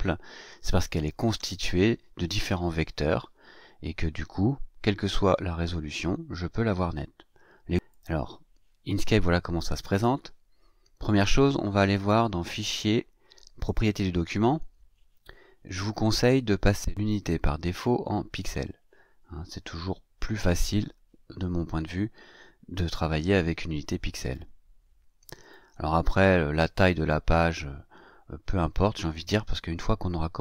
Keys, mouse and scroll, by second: 0.2-0.8 ctrl+scroll down 2, 1.1 ctrl+scroll down 2, 7.9 click, 11.9 click, 13.6 click, 16.9 click, 18.3 click, 24.2 click, 25.4 click.